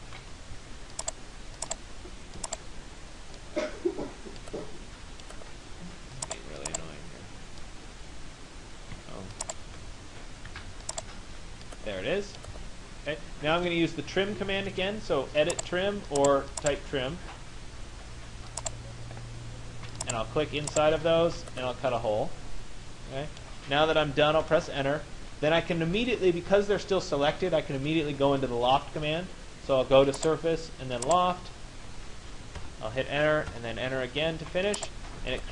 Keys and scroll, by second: 24.0 Return, 33.6 Return.